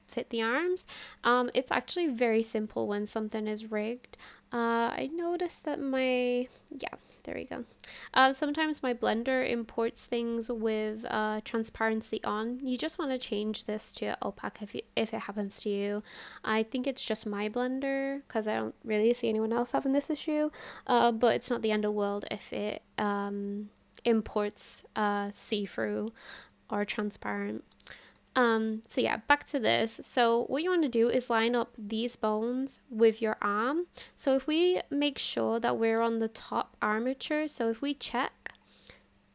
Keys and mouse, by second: 1.6-2.1 shift+middle drag, 2.3 middle click, 3.7 click, 7.2-11.3 drag, 13.2-14.1 drag, 15.4 click, 17.4-18.0 shift+middle drag, 22.2 shift+middle click, 28.3 shift+middle click, 35.3-37.1 drag, 38.2 click.